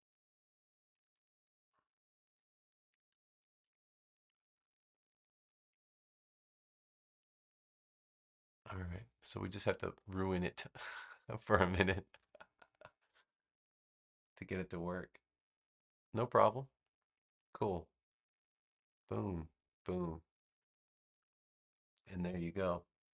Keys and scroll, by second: 4.0 space.